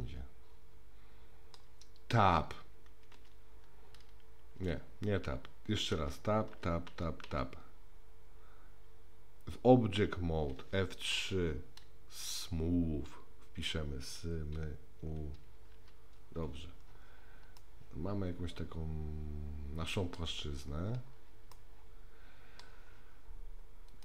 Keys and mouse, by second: 3.2 Tab, 4.6 Tab, 6.0 Tab, 6.5 Tab, 6.9 Tab, 7.3 Tab, 11.4 F3, 17.6-20.2 middle drag, 21.5-22.6 middle drag.